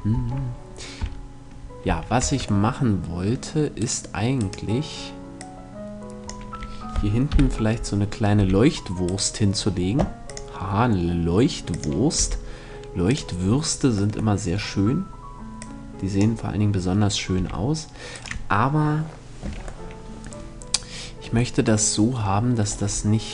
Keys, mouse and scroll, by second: 1.4 a, 1.6 middle click, 1.7 Tab, 3.4-5.2 right drag, 4.9 click, 5.6-6.7 drag, 6.8 KP_7, 7.5 middle click, 7.9 r, 8.7-10.5 right drag, 10.0-11.6 drag, 11.7 r, 12.7-14.4 drag, 13.8-15.5 middle drag, 15.1-17.0 drag, 16.9 r, 19.3 right click, 19.4 middle click, 23.0-23.3 drag.